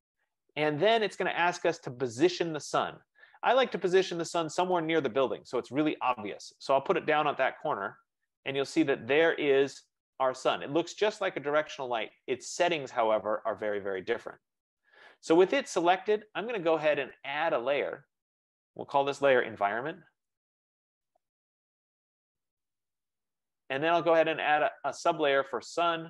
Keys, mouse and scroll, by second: 1.0 F15, 7.2 click, 9.1 click, 14.5 click, 18.2 click, 19.8-23.1 typing, 23.4 Return, 24.8 click, 25.5-26.0 typing.